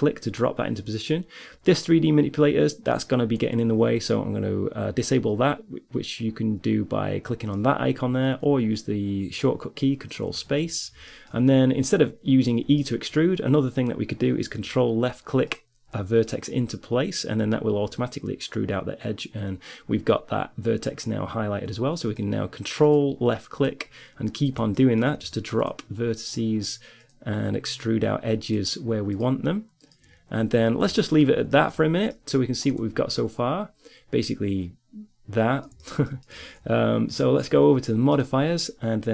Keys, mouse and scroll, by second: 10.5 ctrl+space, 11.3-14.8 middle drag, 14.8-16.9 drag, 22.3-24.6 drag, 24.6-30.2 middle drag, 30.2-31.2 drag, 31.2 middle click, 33.0 Tab, 37.6-39.1 drag.